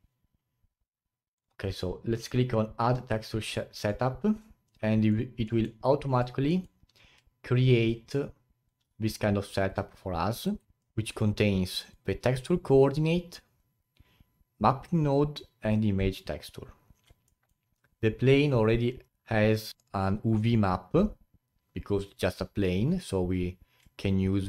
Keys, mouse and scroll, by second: 1.4 click, 3.9-6.0 drag, 6.0 scroll down 2, 9.0-10.2 drag, 10.6 ctrl+right click, 10.8 click, 11.5-11.9 scroll up 3.